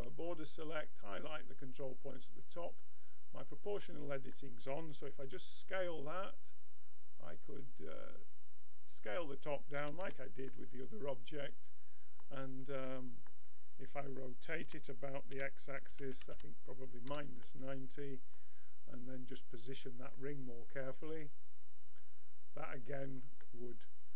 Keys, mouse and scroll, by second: 3.8-5.8 middle drag, 5.2 s, 9.7 a, 10.1 Tab, 12.9-14.6 middle drag, 14.6 r, 17.4-19.4 middle drag, 20.1-23.4 drag, 23.4-24.1 middle drag.